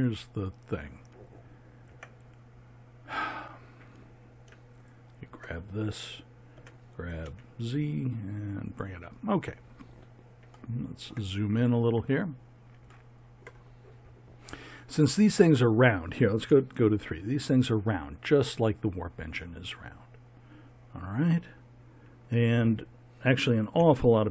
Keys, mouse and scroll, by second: 1.8 Tab, 6.5 g, 9.4 middle click, 9.8 middle click, 10.5-13.4 middle drag, 16.4 KP_3, 23.7 KP_1.